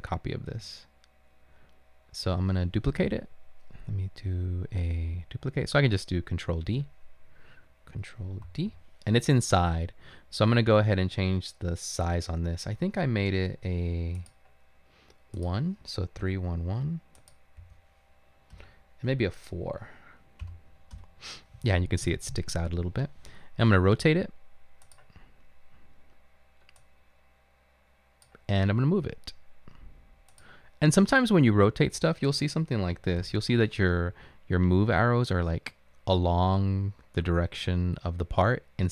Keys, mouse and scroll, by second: 0.0-0.6 typing, 8.5 ctrl+d, 16.8 typing, 20.3-21.0 typing, 33.2 ctrl+l.